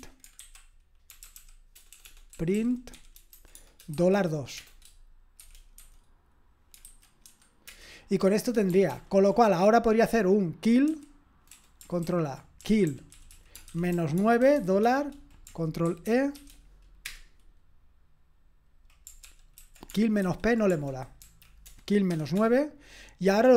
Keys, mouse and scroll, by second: 0.0-7.3 typing, 7.6 Return, 8.9 ctrl+p, 12.0 ctrl+a, 12.4-16.9 typing, 17.0 Return, 19.2 ctrl+p, 19.6 ctrl+a, 20.2 alt+f, 21.2 Right, 21.6-22.4 typing, 22.4 Return.